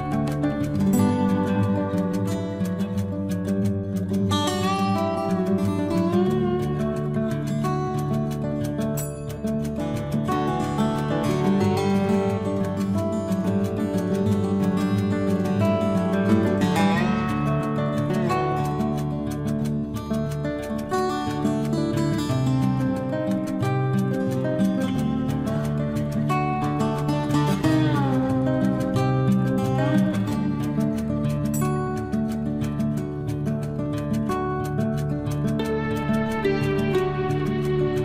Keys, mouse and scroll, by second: 0.7-1.1 scroll down 1, 1.1 middle click, 2.3 scroll up 1, 5.2 scroll up 1, 6.4 click, 7.0 scroll down 1, 7.7-8.9 scroll up 1, 9.5 e, 9.9 scroll up 1, 12.2 click, 13.9 scroll up 1, 14.9 click, 15.2 click, 15.7 scroll up 1, 16.8 click, 20.1 scroll down 1, 20.7 scroll up 1, 21.4 click, 24.9 click, 27.3-27.6 scroll down 1, 31.0 scroll down 1, 31.6 scroll up 1, 32.8 click, 35.2 click.